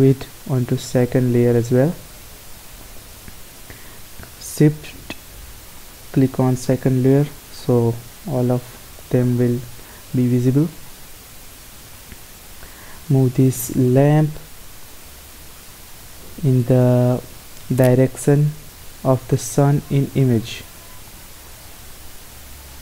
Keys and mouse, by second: 3.3-5.8 middle drag, 5.8-7.3 drag, 7.3 middle click, 7.5 click, 7.8-13.3 middle drag, 13.3 click, 14.3 click, 16.3-17.6 drag, 17.8-19.4 middle drag, 19.4-21.4 drag, 21.9-22.8 drag.